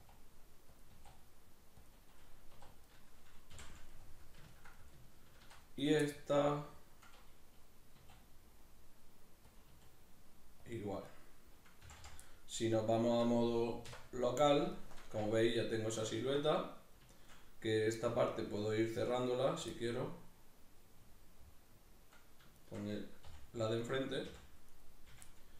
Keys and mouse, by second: 0.0 e, 0.8 click, 1.0 e, 1.9 click, 2.6 2, 2.9 right click, 3.6 f, 3.9-5.8 middle drag, 5.8 right click, 6.0-9.5 middle drag, 7.9 e, 9.5 click, 9.7 e, 10.7 click, 11.1 right click, 11.9 f, 12.3-17.8 middle drag, 13.8 \, 17.8 right click, 18.0-19.2 middle drag, 19.2 right click, 19.8-22.6 middle drag, 22.6 shift+right click, 23.3 f, 23.8 right click, 24.3 f, 24.7 right click, 25.1 f, 25.3-25.5 middle drag.